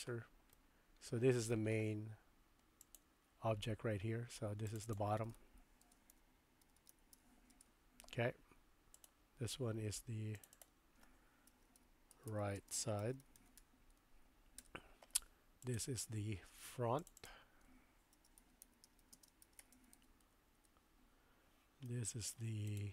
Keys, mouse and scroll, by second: 0.6-1.5 middle drag, 4.7 click, 4.9-8.3 drag, 6.8 t, 8.9 click, 10.3 click, 10.6-15.0 drag, 15.6 click, 17.0 click, 17.2-21.4 drag, 21.9 middle click.